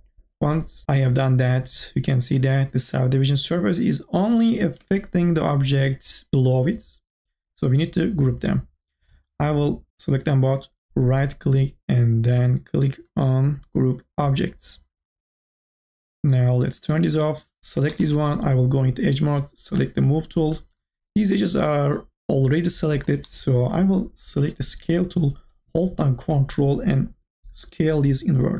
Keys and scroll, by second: 4.7-5.7 typing.